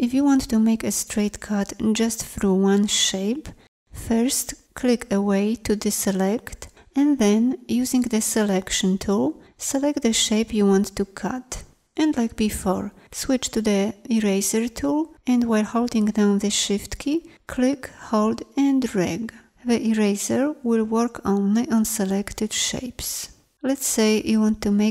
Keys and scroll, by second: 7.6 v, 13.7 shift+e.